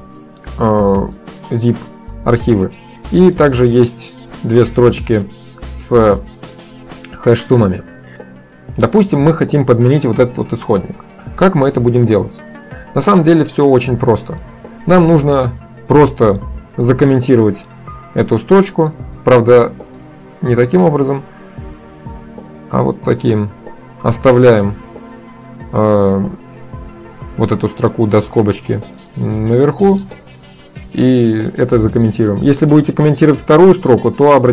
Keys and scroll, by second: 18.3 ctrl+d, 21.8 ctrl+shift+d, 23.4 Return, 30.2 ctrl+d.